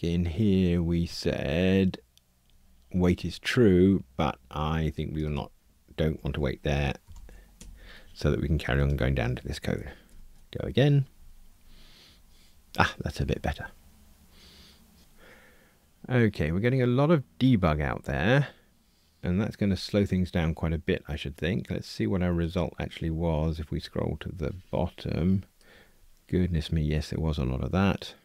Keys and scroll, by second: 7.5 Escape, 10.0 ctrl+r.